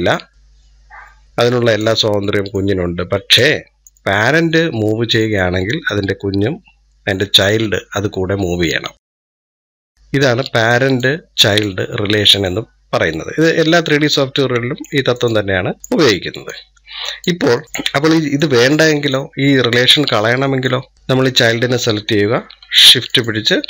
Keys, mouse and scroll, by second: 2.4 click, 3.7-5.5 drag, 11.3-13.5 drag, 13.6-15.0 middle drag, 15.0-15.7 drag, 15.7-16.3 middle drag, 16.3-17.3 drag, 17.4 middle drag, 17.9-19.0 middle drag, 19.0 click, 19.9-20.7 middle drag, 20.7 scroll up 2, 20.9 middle click, 21.1-23.6 drag.